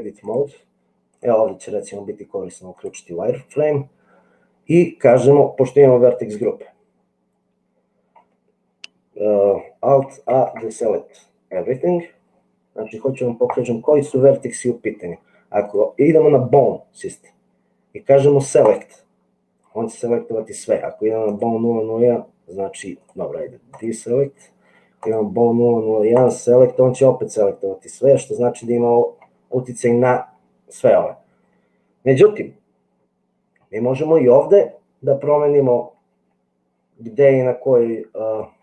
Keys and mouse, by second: 0.3 click, 6.3 click, 10.4 alt+a, 22.9 click, 23.7 click, 24.9 click.